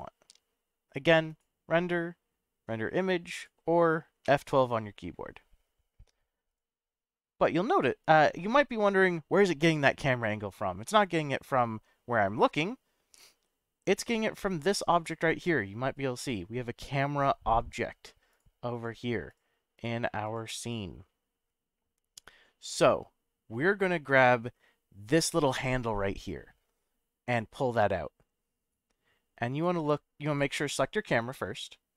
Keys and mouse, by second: 1.3-3.1 drag, 3.4 click, 6.6 F12, 7.4 drag, 9.8-10.7 middle drag, 11.2-13.8 middle drag, 16.1 click, 18.3 click, 18.7 click, 19.8 drag, 20.3 click, 26.2-29.7 drag, 30.3 click.